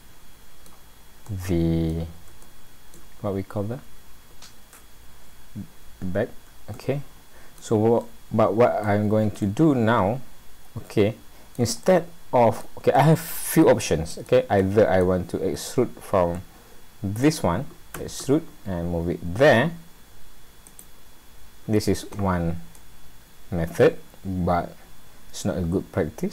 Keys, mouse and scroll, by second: 1.2 middle click, 2.5 shift+middle click, 5.9-6.5 scroll up 3, 6.7 middle click, 8.0 middle click, 9.8 middle click, 11.8 middle click, 13.0 middle click, 13.8 middle click, 14.6 middle click, 16.3 middle click, 18.0 e, 22.3-22.7 scroll down 3, 22.7 middle click, 25.0-25.6 scroll down 3, 25.6 scroll up 1.